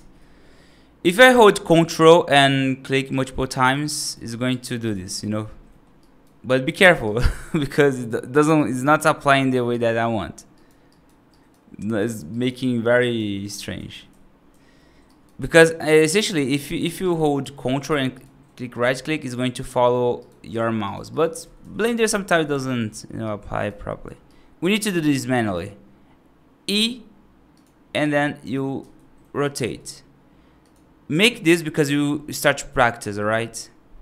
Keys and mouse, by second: 3.5 ctrl+right click, 4.4 ctrl+right click, 5.6 middle click, 5.8 right click, 6.3 right click, 6.9 right click, 7.5 right click, 8.4 right click, 9.2 right click, 9.6 right click, 10.4 right click, 10.8 right click, 11.2 right click, 12.2 right click, 12.9 right click, 13.4 ctrl+z, 13.6 ctrl+z, 13.8 ctrl+z, 13.9 ctrl+z, 14.4 ctrl+z, 15.0 right click, 15.6 right click, 16.9 alt+right click, 17.5 middle click, 18.0 ctrl+right click, 18.6 ctrl+z, 19.1 ctrl+right click, 21.3 ctrl+z, 21.4 ctrl+z, 21.6 ctrl+z, 21.8 ctrl+z, 23.1 right click, 23.7 middle click, 24.2 right click, 24.8 middle click, 25.2 right click, 26.5 e, 27.8 right click, 28.6 r, 29.5 g, 32.8 middle click.